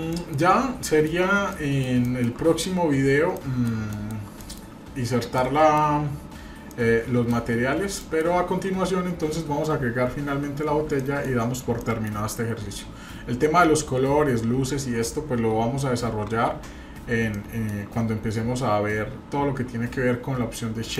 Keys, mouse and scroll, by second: 0.1 middle click, 0.4-0.7 scroll down 2, 0.9-1.2 shift+middle drag, 1.2 scroll up 1, 1.5 middle click, 2.0 shift+middle click, 2.7-3.1 scroll up 1, 3.3 middle click, 3.9-4.2 shift+middle drag, 4.4 middle click, 4.5 scroll down 1, 4.9 scroll up 1, 5.3 shift+middle click, 6.1 scroll down 1, 6.7 middle click, 7.4 scroll up 1, 8.0 shift+middle click, 10.1-10.9 scroll down 4, 11.0-11.4 shift+middle drag, 11.5 scroll up 1, 11.8 shift+middle click, 17.3 shift+middle click, 17.9-18.4 scroll down 1.